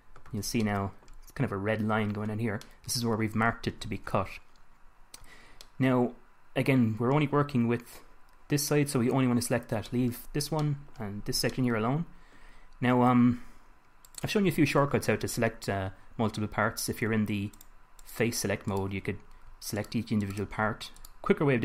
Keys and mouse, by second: 0.7 a, 4.1 a, 14.4-19.1 drag, 20.6-21.6 drag.